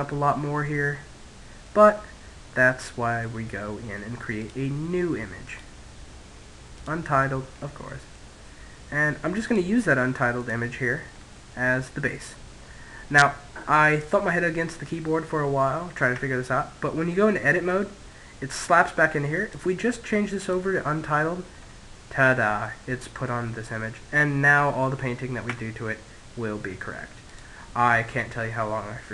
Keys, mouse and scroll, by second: 3.3 click, 6.4-8.2 middle drag, 8.2 click, 10.0-12.0 middle drag, 15.0 Tab, 16.0-17.9 middle drag, 18.2 click, 20.3-22.9 middle drag, 24.4 Tab, 26.0 click.